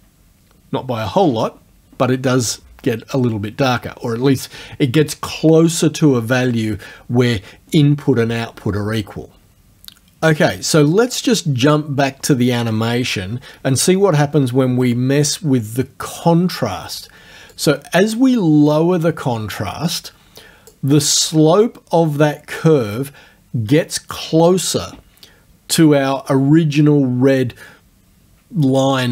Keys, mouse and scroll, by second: 0.5-14.0 scroll up 1, 14.2 alt+Tab, 17.5-20.9 drag.